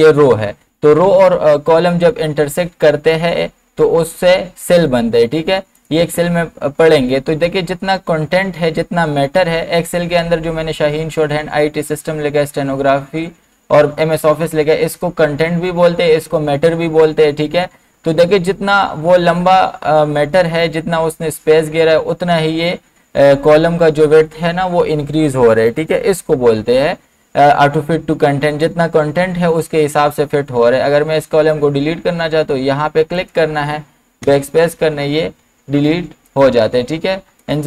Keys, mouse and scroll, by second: 5.8 click, 5.8 click, 33.2 click, 34.3 BackSpace, 36.3 click.